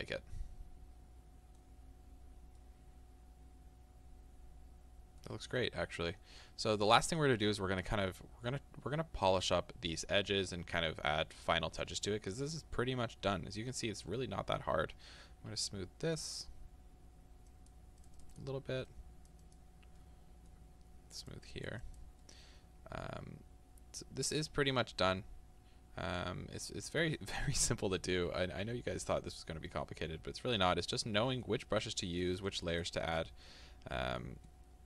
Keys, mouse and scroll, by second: 2.1-2.6 scroll down 2, 2.6 scroll down 1, 17.5-20.0 drag, 20.0-21.2 middle drag, 21.2-22.3 drag, 22.3-32.2 middle drag, 24.8-25.1 scroll down 2, 25.1-25.8 scroll up 2, 25.8 scroll up 1, 25.9-26.7 scroll down 2, 32.2-33.5 drag, 33.5-34.8 middle drag.